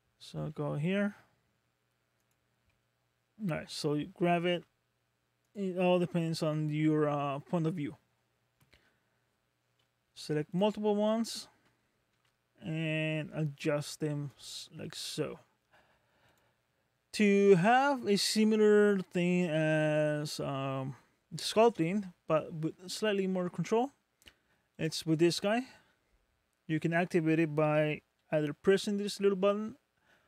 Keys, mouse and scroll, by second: 0.4 r, 2.7 middle click, 4.5 g, 5.9-6.4 scroll up 3, 6.5 middle click, 10.5 shift+click, 11.1 shift+click, 12.2 g, 14.8 middle click, 16.3 click, 18.5-19.0 scroll down 2, 19.0 scroll up 2, 24.8 click.